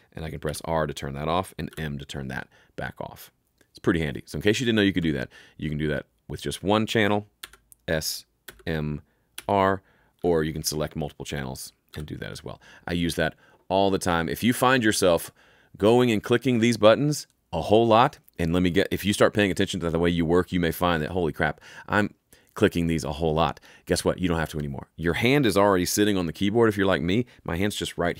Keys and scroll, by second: 0.4 r, 1.6 m, 7.3 s, 8.4 m, 9.3 r, 10.1 s, 11.2 r, 11.8 s.